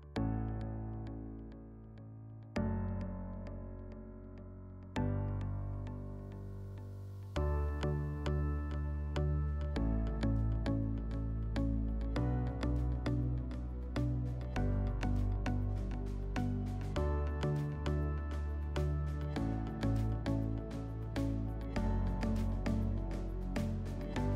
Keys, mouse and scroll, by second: 0.2 ctrl+z, 0.7 ctrl+z, 11.9 click, 12.3 click, 12.9 click, 14.2 click, 15.1 click, 20.5 click.